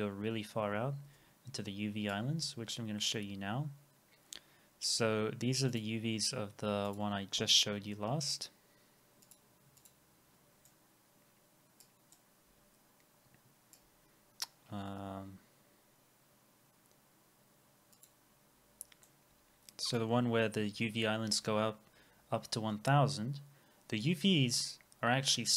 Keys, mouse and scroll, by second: 2.6-5.2 scroll, 10.7 right click, 12.5 w, 14.2 scroll, 19.1 right click, 19.3 w.